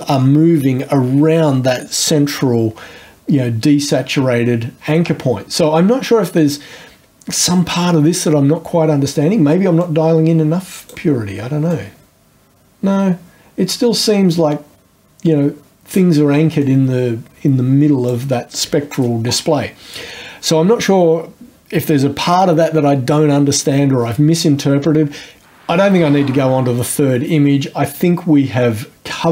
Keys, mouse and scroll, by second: 9.8-11.1 drag, 11.7-16.2 drag, 16.2-16.6 scroll up 1, 16.6-19.5 drag.